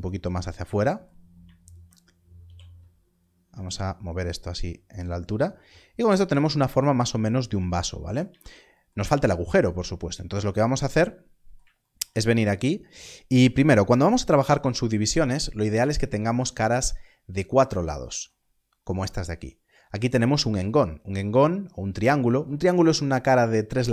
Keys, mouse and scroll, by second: 1.6 alt+click, 2.3 g, 4.8 click, 5.1-7.3 scroll down 1, 8.2 scroll, 8.3 alt+a, 10.0 scroll up 1.